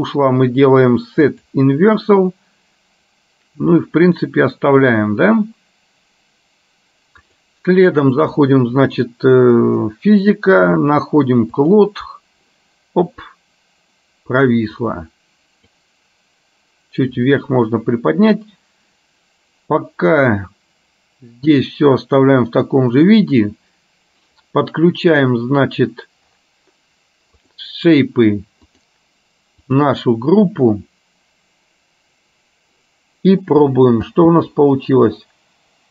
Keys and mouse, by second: 1.3 click, 8.3 click, 11.8 click, 15.0-16.0 drag, 27.6 click, 28.8-30.0 drag, 34.2 space.